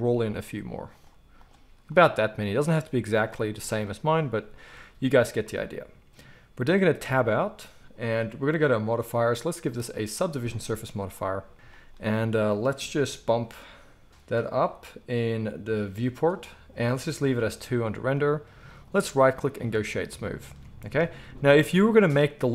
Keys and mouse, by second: 2.2-8.4 middle drag, 7.1 Tab, 8.4 click, 8.5-9.3 middle drag, 9.3 click, 9.4 middle click, 9.7-20.6 drag, 18.8-20.6 middle drag, 18.8-20.6 right drag, 20.6 alt+a, 21.5-22.5 middle drag.